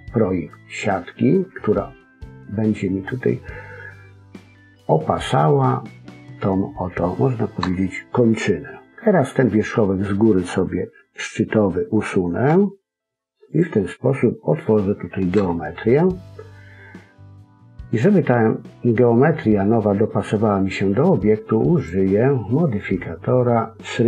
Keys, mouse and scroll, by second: 0.4-1.1 scroll up 1, 1.1 scroll up 2, 5.0 click, 6.4-6.7 scroll down 4, 6.7 scroll up 1, 6.7 middle click, 7.5 KP_1, 8.3-8.9 scroll up 1, 8.9 middle click, 15.3 KP_1, 21.7 click.